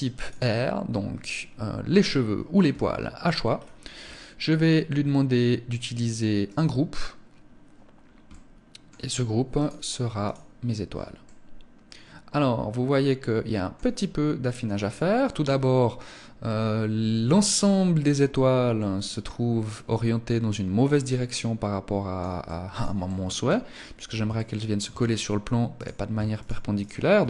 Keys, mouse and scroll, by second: 2.8-4.9 scroll down 8, 4.9 scroll down 2, 5.8 click, 7.6 middle click, 8.8 click, 10.6 middle click, 13.3 scroll up 3, 14.0 scroll down 1, 18.1 middle click, 21.8 middle click, 23.6 shift+middle click, 25.1 right click, 25.7 shift+right click, 26.1 right click.